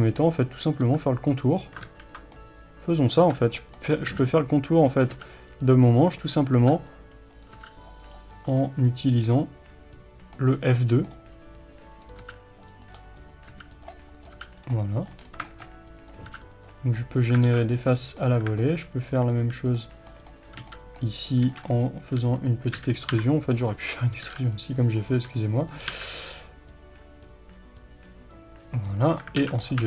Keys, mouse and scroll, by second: 0.2-1.9 middle drag, 0.9 f, 1.9 ctrl+z, 2.4-4.4 middle drag, 4.2 f, 4.8 click, 5.2 f, 6.2 click, 6.6 f, 7.4 click, 7.6 f, 8.2 right click, 8.6-12.0 middle drag, 10.6 scroll up 1, 12.0 click, 12.3 f, 13.2 click, 13.6 f, 14.2 click, 14.4 f, 15.1 right click, 15.3 scroll down 1, 15.5-16.1 shift+middle drag, 16.1 click, 16.3 f, 17.0-18.8 middle drag, 17.5 alt+a, 17.8 scroll down 1, 18.8 alt+click, 19.4-25.0 middle drag, 21.0 b, 22.8 KP_1, 23.7 scroll up 1, 24.2 g, 25.0 right click, 25.2 e, 25.9 g, 29.1-29.7 middle drag, 29.5 alt+a, 29.7 click.